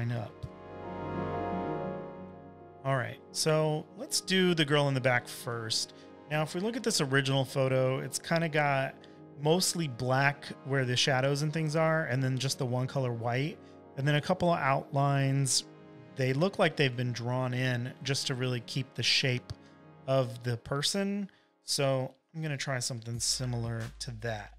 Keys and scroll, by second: 0.8 super+t, 1.6 v, 7.9 v, 8.4 z, 9.6 space, 10.1 space, 10.2 space, 10.3 v, 17.9 space, 18.4 space, 18.5 space, 19.8 super+-, 20.0 super+-, 20.7 space, 21.3 space, 21.3 space, 24.2 super+-.